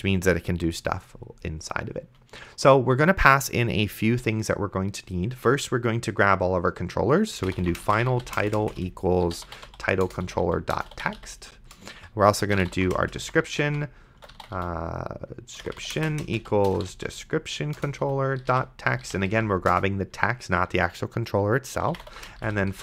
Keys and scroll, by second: 7.4-19.8 typing, 17.8 Return, 21.6-22.8 typing.